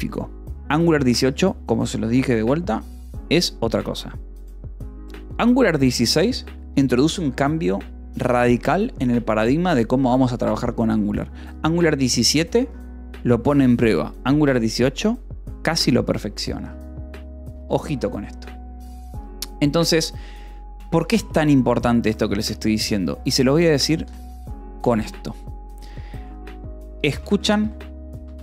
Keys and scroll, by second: 20.7 l, 21.3 h, 22.7 j, 24.0 o, 24.8 :, 24.9 space, 27.2-28.4 typing.